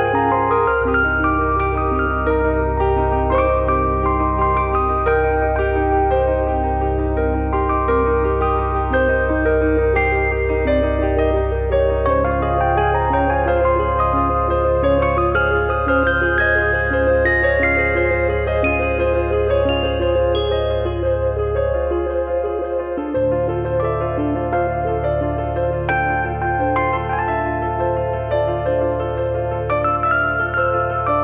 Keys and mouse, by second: 0.1 z, 0.6 click, 3.1 Tab, 5.9 click, 9.8 KP_3, 11.4 Tab, 11.7 middle click, 11.9 shift+middle click, 12.3 click, 14.9 click, 17.6 click, 18.4 click, 20.8 middle click, 21.3 shift+r, 22.0 r, 22.8 Escape, 23.1 click, 23.5 KP_1, 29.3 click.